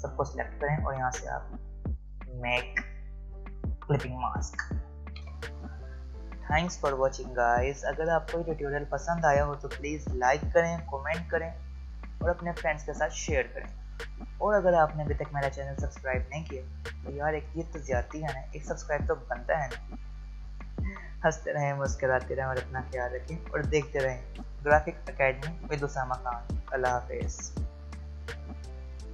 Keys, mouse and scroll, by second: 1.3 right click, 3.5 click.